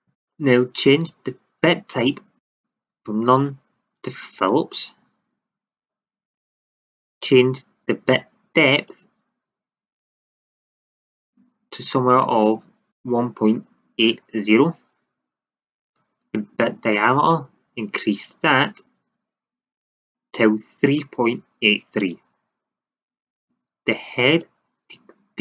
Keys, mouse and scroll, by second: 2.3-4.5 drag, 6.2-10.6 drag, 17.0-19.0 drag, 24.4-25.4 drag.